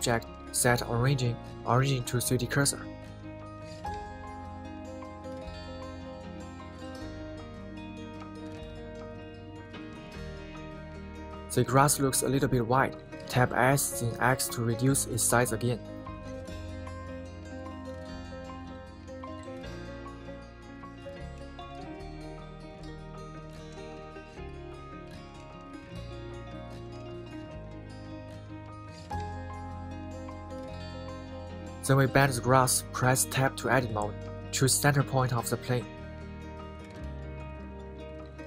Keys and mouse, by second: 0.7-4.7 right drag, 4.7 middle click, 5.3 middle click, 5.7 g, 6.6 Escape, 7.9 middle click, 8.4 KP_1, 8.9-9.3 middle drag, 13.5-16.8 middle drag, 17.0 KP_1, 20.6 s, 20.9 x, 25.6 click, 26.3-27.6 middle drag, 27.9 middle click, 28.9 KP_1, 29.4-31.5 middle drag, 32.0 middle click, 32.8 KP_1, 34.9 Tab.